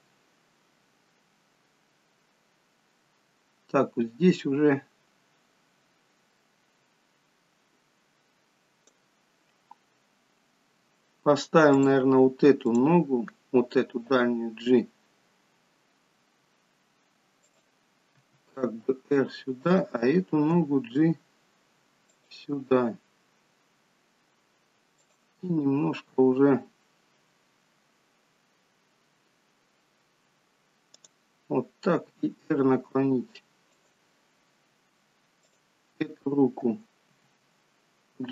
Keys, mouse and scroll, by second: 9.8 scroll up 2, 10.4-11.0 scroll down 1, 11.8 click, 12.6 click, 14.0 g, 18.8 r, 19.8 click, 20.6 g, 25.1 click, 25.7 g, 32.0 r, 35.5 click, 37.1 g.